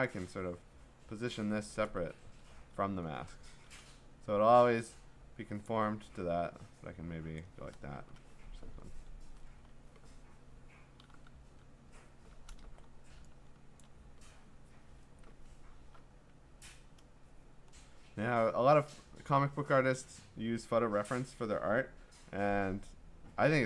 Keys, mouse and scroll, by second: 1.8 click, 2.1 ctrl+t, 5.6 click, 7.4 click, 7.9 Return, 8.8-9.2 scroll, 11.0 ctrl+i, 11.5 ctrl+i, 12.7 scroll, 13.2-13.9 scroll, 13.8 click, 15.6-16.0 scroll, 16.5-18.4 scroll.